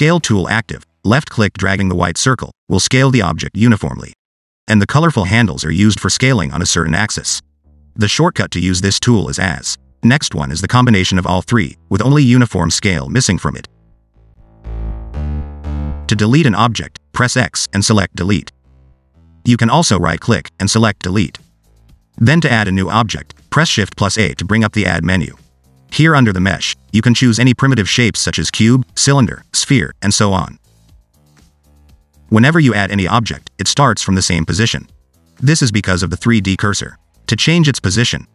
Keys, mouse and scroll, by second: 1.1 click, 2.7 click, 7.7 click, 8.4 s, 11.5 click, 14.7 click, 17.3 x, 19.7 ctrl+z, 20.5 right click, 23.3 shift+a, 32.0 click, 34.6 click, 37.3 ctrl+z, 37.8 ctrl+z.